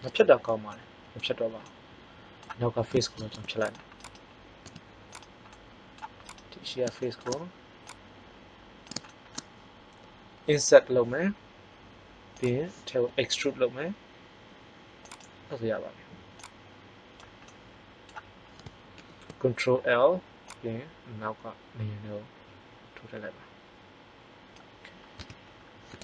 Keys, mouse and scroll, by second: 3.2 ctrl+Tab, 4.0-5.0 drag, 4.6 x, 5.5 middle click, 10.3 i, 13.0 e, 17.6 middle click, 18.8 ctrl+l, 25.0 Tab.